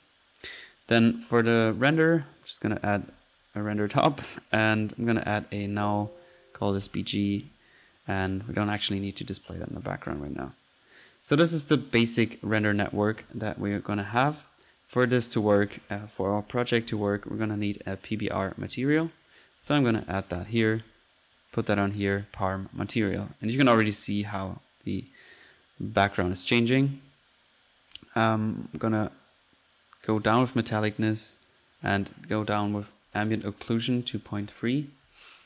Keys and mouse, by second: 0.8 click, 1.2-2.0 typing, 2.7-3.0 drag, 3.3 middle click, 4.1-4.9 drag, 5.2 click, 5.6 alt+n, 6.0-6.8 alt+drag, 6.8 alt+drag, 9.2-9.8 drag, 9.9 click, 11.7-12.7 right drag, 12.7-13.3 drag, 13.5-13.9 drag, 15.1 click, 16.2-17.8 typing, 18.2 click, 18.6 drag, 19.7 click, 20.8 click, 22.7 click, 23.6 drag, 25.0 click, 25.4-26.2 drag, 28.8-30.5 drag, 31.7-32.0 drag.